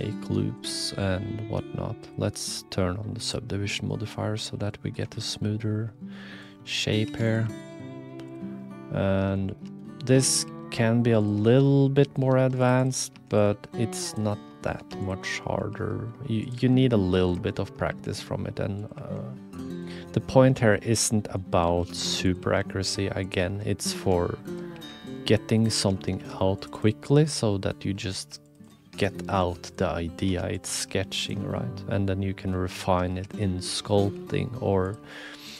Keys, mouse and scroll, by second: 0.6-2.2 drag, 3.3 click, 3.9 click, 5.1 shift+middle click, 5.3 middle click, 5.9 middle click, 6.5 middle click, 7.0 2, 7.2 click, 7.4 g, 8.7 middle click, 9.5 2, 10.3 click, 10.4 g, 11.4 shift+middle click, 11.9 middle click, 12.0 click, 12.3 ctrl+r, 13.1-16.5 typing, 14.5 click, 15.1 middle click, 15.3 click, 17.5 shift+middle click, 18.2 e, 18.9 e, 20.0 click, 20.8 middle click, 21.6 s, 22.4 g, 23.6 click, 24.5 shift+middle click, 24.7 f, 25.1 click, 25.7 2, 26.2 ctrl+r, 26.7 click, 27.2 middle click, 28.1 ctrl+r, 28.8 3, 29.0 click, 29.3 x, 29.9 middle click, 30.2 2, 30.6 click, 30.7 g, 31.6 click, 33.1 1, 33.6 click, 34.1 g, 35.5 click.